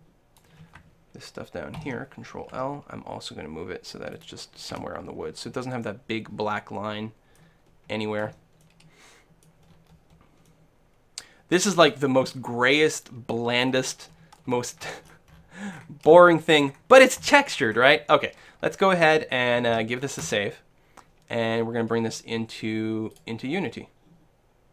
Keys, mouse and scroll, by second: 2.9 g, 4.3-6.2 drag, 4.7 a, 5.9-8.3 middle drag, 8.3 Tab, 8.6-19.7 middle drag, 20.4 ctrl+s.